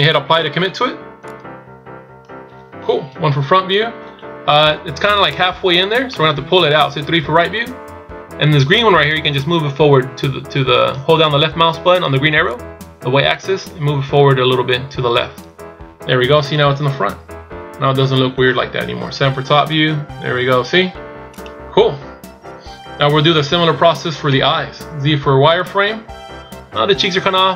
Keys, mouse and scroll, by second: 1.5 click, 3.2 KP_1, 6.1 middle click, 7.0 KP_3, 9.3 click, 12.6 click, 16.7 KP_1, 18.9 KP_7, 19.7 KP_1, 21.3 right click, 24.2 z.